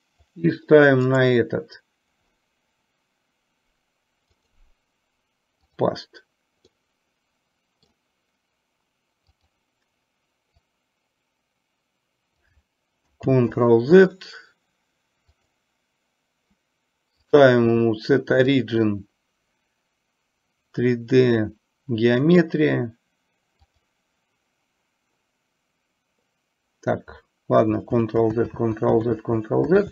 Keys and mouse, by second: 0.4 click, 1.2-2.4 right drag, 4.5-6.0 right drag, 6.9-8.0 middle drag, 9.4 click, 10.7-12.6 drag, 13.5 ctrl+z, 15.4-16.6 drag, 17.4 click, 18.5-24.0 drag, 28.1 ctrl+z.